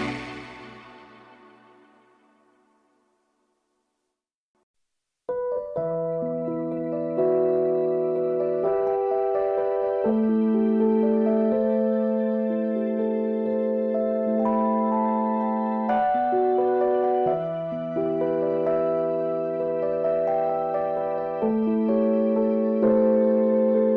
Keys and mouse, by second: 0.9 click, 1.8 click, 1.8 click, 4.6 shift+click, 7.2-9.7 shift+drag, 16.5 click, 19.8-23.3 drag.